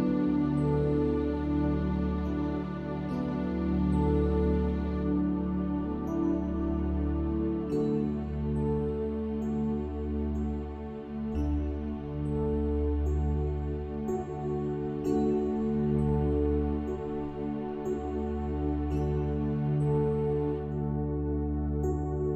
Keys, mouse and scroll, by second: 1.1-2.6 drag, 2.7 click, 4.4 middle click, 5.3 click, 6.5 click, 7.8 click, 9.1 click, 9.3 e, 10.0 click, 11.0 click, 11.2 s, 12.3 click, 14.7 click, 15.3 s, 16.9 click, 19.0 click, 21.8 click.